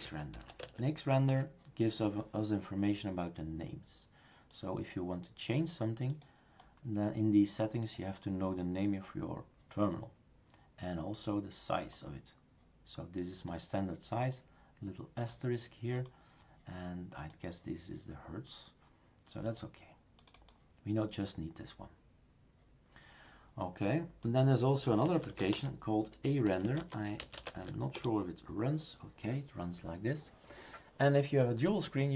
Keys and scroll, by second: 0.0-0.8 typing, 1.3 Return, 24.8-27.9 typing, 27.9 Return.